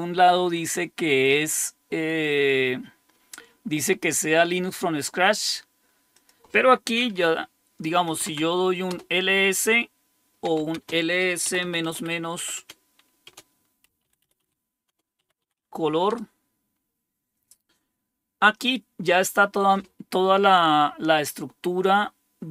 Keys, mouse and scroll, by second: 6.1 click, 7.8-8.7 typing, 8.9 Return, 10.4-16.1 typing.